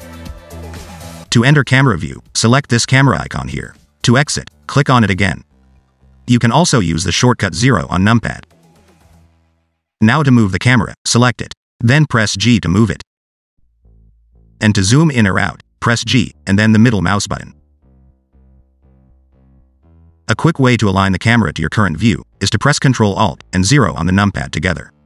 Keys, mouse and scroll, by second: 2.8 click, 5.0 click, 5.5-5.8 scroll down 4, 5.8 middle click, 7.2 KP_0, 8.9-9.9 scroll up 1, 9.9 KP_0, 10.4 KP_0, 11.3 click, 13.5 g, 16.2 g, 21.2-21.7 scroll down 2, 21.3 middle click, 22.0 scroll up 2, 22.1 middle click, 22.6 middle click, 23.1 scroll up 1, 23.2 middle click, 24.4 ctrl+alt+KP_0.